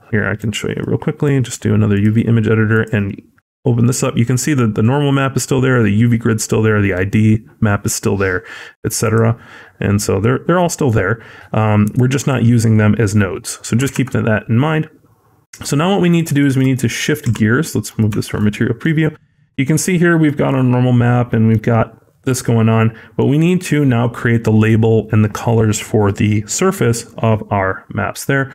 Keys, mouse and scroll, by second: 9.5-11.3 scroll down 12, 10.0-11.3 scroll up 1, 11.8 click, 11.8 scroll up 4, 14.5 scroll down 2, 15.3 click, 16.2 shift+middle click, 16.6 middle click, 17.1 z, 18.1 shift+middle click, 18.3-18.7 scroll up 1, 18.7 middle click, 22.1-22.5 scroll down 3, 22.5-23.0 scroll up 3, 23.0 middle click.